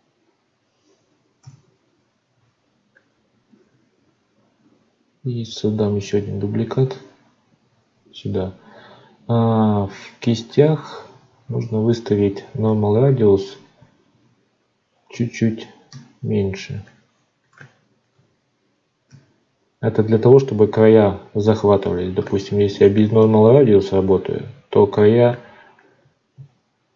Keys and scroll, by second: 26.3 ctrl+z.